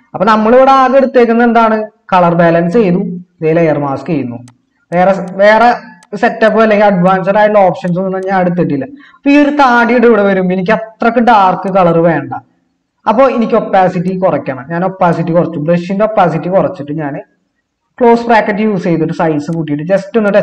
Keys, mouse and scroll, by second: 17.6-18.9 typing.